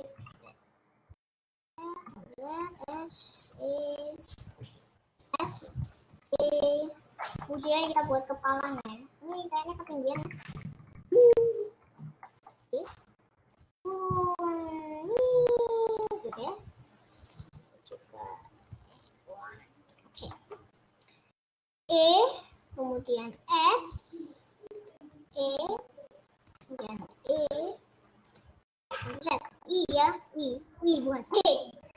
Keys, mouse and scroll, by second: 0.4 ctrl+z, 1.6 ctrl+z, 2.5 ctrl+z, 2.8 s, 3.4 e, 5.4 s, 6.0 e, 7.4 shift+middle click, 8.0 scroll up 1, 8.2-8.8 scroll down 4, 8.8 middle click, 9.4-10.0 scroll up 6, 10.0-11.2 KP_Add, 12.4 middle click, 12.5-13.0 scroll down 3, 13.7 click, 16.4-17.4 middle drag, 17.4 click, 19.6 click, 20.2 scroll up 2, 20.4 middle click, 20.6-21.2 scroll down 3, 21.3-21.6 scroll up 2, 21.6 middle click, 21.9 e, 23.2 s, 25.0 e, 27.1 middle click, 27.2 e, 29.0 ctrl+z, 29.6 middle click.